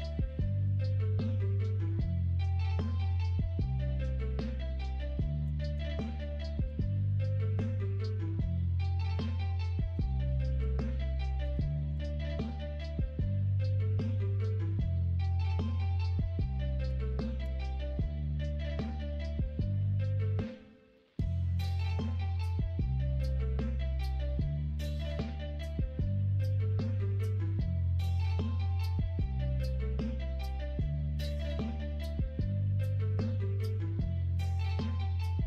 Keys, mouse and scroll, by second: 0.8 middle click, 1.0-2.1 scroll down 1, 2.1-3.3 scroll down 1, 3.3-8.0 scroll down 1, 8.0-8.8 scroll down 1, 8.8-10.4 scroll down 1, 10.4 Right, 10.4-13.6 drag, 19.9 middle click, 20.9 middle click, 22.0 middle click, 22.9 shift+middle click, 23.4 middle click, 24.0 shift+middle click, 25.7 middle click, 26.9 shift+middle click, 28.9-30.1 middle drag, 30.5 shift+middle click, 31.3 middle click, 32.1 middle click, 32.6 shift+middle click, 33.1-35.4 middle drag.